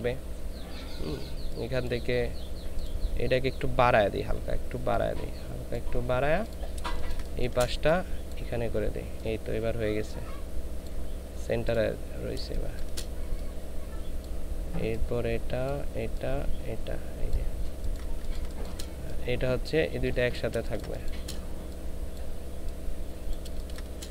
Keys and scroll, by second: 6.8 space, 12.4 ctrl+space, 18.2 ctrl+space, 20.6 ctrl+space, 23.5 ctrl+space.